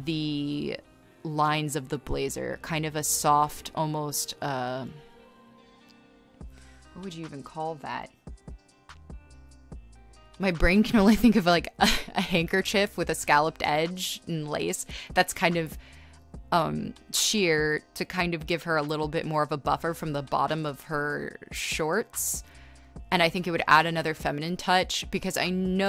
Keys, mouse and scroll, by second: 0.8 scroll, 1.3 space, 22.4 space, 23.5 space, 24.2 space.